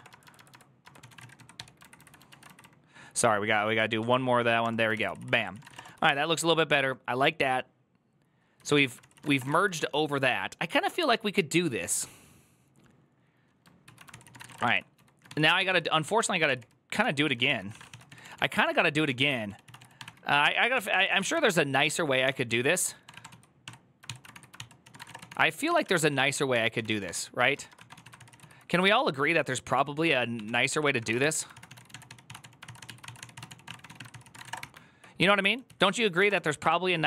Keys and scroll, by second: 2.2 ctrl+Left, 3.0-3.8 Left, 3.8 \, 4.8 Return, 4.8 ctrl+c, 5.4 ctrl+c, 5.4 a, 8.8-9.5 typing, 14.5 ctrl+r, 14.5 ctrl+d, 14.7-19.1 typing, 24.1 shift+k, 26.3-28.2 typing, 30.5-36.7 typing, 35.5 alt+{.